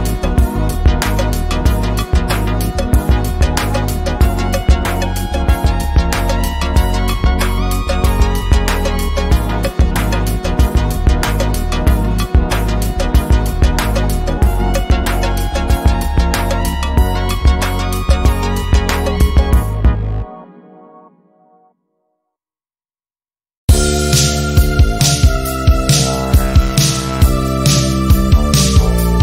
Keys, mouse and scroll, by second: 4.0-5.5 drag, 13.7 ctrl+z, 14.6 click, 18.0 ctrl+z, 18.4 click, 26.0 ctrl+d, 26.6 ctrl+d, 27.0 click.